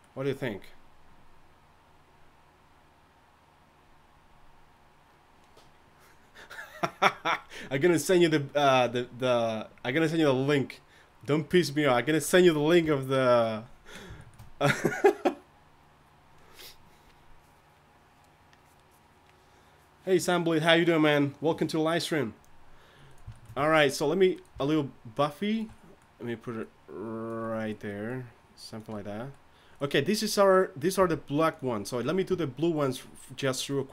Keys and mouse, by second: 12.8 KP_3, 23.5 Tab, 24.7 alt+s, 26.7-31.0 drag, 29.7-31.0 right drag, 31.0 r, 32.3 Tab.